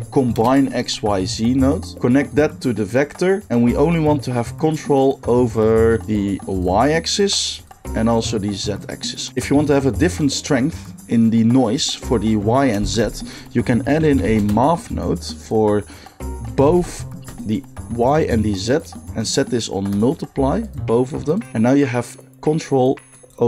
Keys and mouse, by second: 2.0-6.7 drag, 6.7-7.2 middle drag, 7.2-15.5 drag, 12.8 shift+a, 15.5-15.9 middle drag, 15.9-17.3 drag, 16.6 shift+d, 17.3-18.6 middle drag, 18.6-23.3 drag, 23.3-23.4 middle drag.